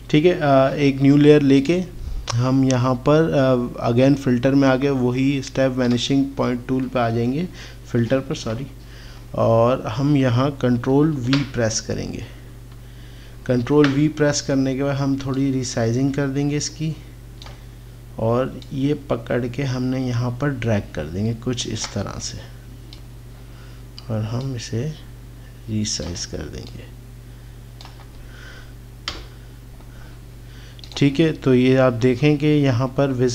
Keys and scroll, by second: 8.5 ctrl+=, 11.1 ctrl+v, 13.7 ctrl+t, 29.2 Return.